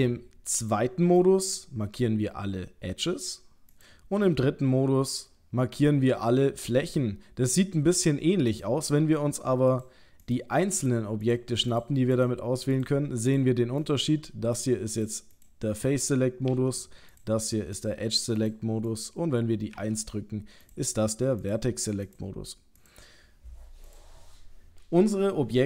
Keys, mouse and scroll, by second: 0.6 click, 1.2 click, 4.2 3, 5.1 click, 8.5 click, 9.7 click, 10.8 click, 12.2 click, 13.8 click, 14.6 click, 15.0 click, 16.5 click, 16.5 2, 17.1 click, 17.8 click, 18.4 click, 19.8 1, 20.6 click, 21.4 click, 22.8 click.